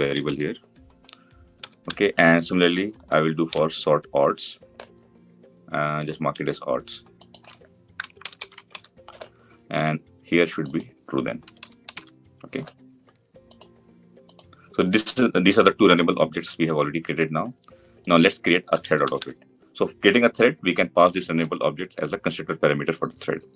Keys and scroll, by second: 3.4 ctrl+d.